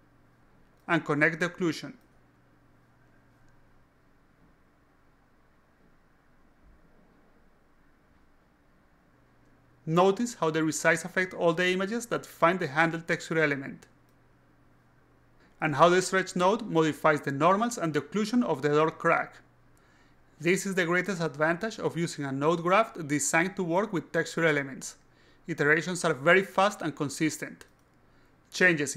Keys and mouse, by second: 0.9 click, 3.6 alt+click, 5.3 click, 6.1 click, 6.9 click, 7.5 click, 8.2 click, 8.8 click, 8.9 click, 10.1 click, 10.6 a, 11.4-12.7 drag, 14.2 click, 14.3 a, 15.2 click, 16.8 click, 18.4 click, 20.2 click, 21.3 alt+click, 21.6 alt+click, 22.6 click, 22.9 a, 23.5 click, 25.1 click, 26.4 click, 28.0-28.5 alt+drag, 28.8 alt+click.